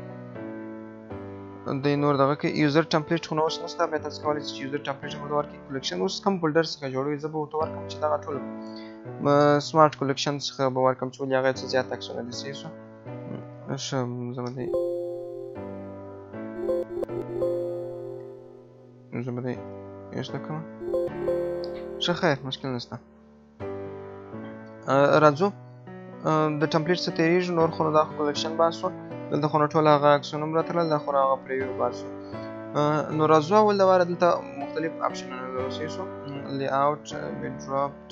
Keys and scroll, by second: 14.6 alt+BackSpace, 18.2 ctrl+BackSpace, 19.6 Return, 20.8 alt+BackSpace.